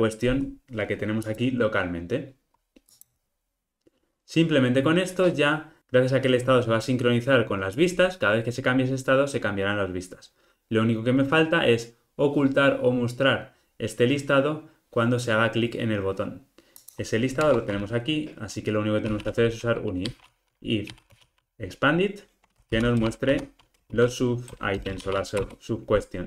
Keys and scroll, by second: 23.1 Return.